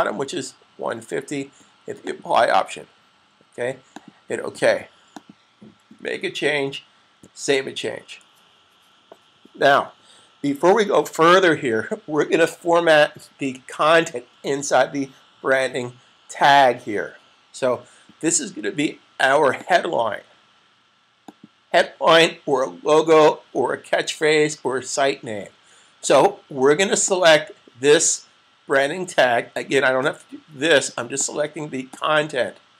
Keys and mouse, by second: 1.7 click, 7.0 super+s, 19.4 click, 27.1 click, 30.1 click.